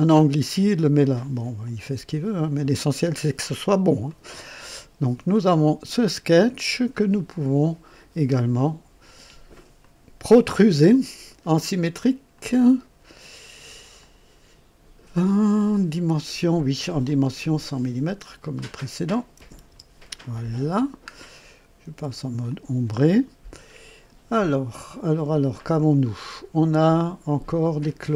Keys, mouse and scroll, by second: 1.6 click, 3.1 scroll up 1, 4.0-4.8 right drag, 5.3-7.1 drag, 9.8 click, 12.3 click, 13.9 click, 15.3 click, 18.4 click, 19.3 KP_0, 19.6 Return, 20.6-21.0 scroll down 1, 21.0 scroll up 1, 22.5-23.7 drag, 27.8 click.